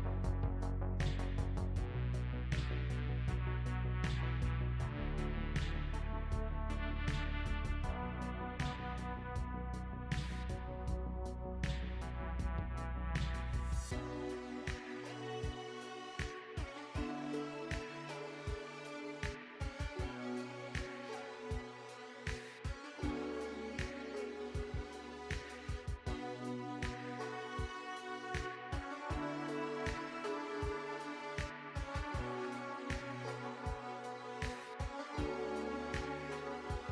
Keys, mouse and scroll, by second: 0.2 s, 1.2 middle click, 1.5 g, 2.4 s, 2.5 middle click, 2.9 s, 3.5 alt+z, 3.6 middle click, 4.2 e, 4.5 middle click, 5.0 g, 5.8 middle click, 6.3 middle click, 7.4 middle click, 7.8-10.7 typing, 8.1 middle click, 8.8 middle click, 9.7 middle click, 10.5 middle click, 11.2 middle click, 11.8 e, 12.2 middle click, 12.5 s, 13.1 middle click, 13.8 g, 14.3 middle click, 14.8 s, 15.3 middle click, 16.0 e, 16.7 middle click, 16.8 g, 17.2 s, 17.5 g, 17.9 middle click, 18.7 shift+middle click, 19.7 e, 20.0 middle click, 20.2 g, 20.6 s, 21.1 middle click, 21.9 g, 22.5 middle click, 22.9 s, 23.4 middle click, 23.9 e, 25.0 middle click, 26.4 s, 27.1 middle click, 27.9 s, 28.3 middle click, 29.3 e, 29.6 middle click, 29.8 s, 30.3 middle click, 31.3 middle click, 31.8 e, 32.0 s, 32.4 middle click, 32.6 s, 32.9 middle click, 34.2 e, 34.7 middle click, 35.4 middle click, 36.1 e, 36.4 s.